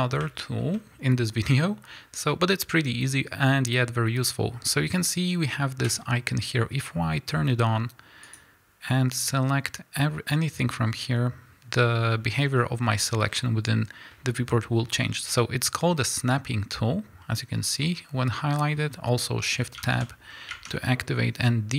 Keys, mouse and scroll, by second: 0.4-5.9 shift+middle drag, 2.8-3.4 scroll down 1, 3.4-4.3 scroll up 1, 5.9 click, 8.2-21.7 drag, 12.5 scroll down 1, 12.8 scroll up 1, 13.3 scroll down 1, 19.8 shift+Tab.